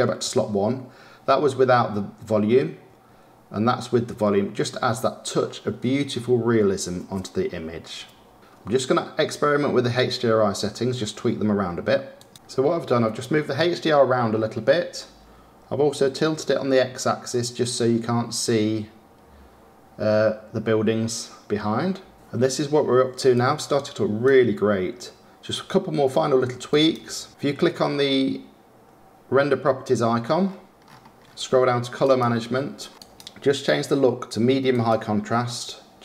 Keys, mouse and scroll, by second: 17.5-20.6 drag, 26.6 click, 27.3-28.7 scroll up 10, 30.3-31.9 scroll down 15, 31.9 click, 32.8 scroll down 1, 32.9-35.9 drag.